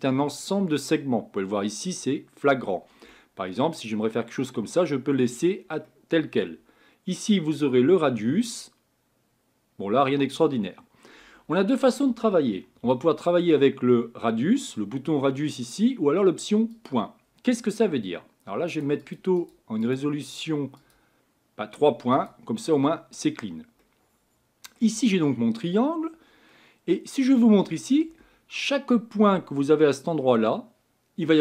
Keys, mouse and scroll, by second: 3.1-8.0 middle drag, 8.0-16.9 drag, 18.8-23.1 drag, 23.1 scroll down 4, 23.8-31.4 middle drag.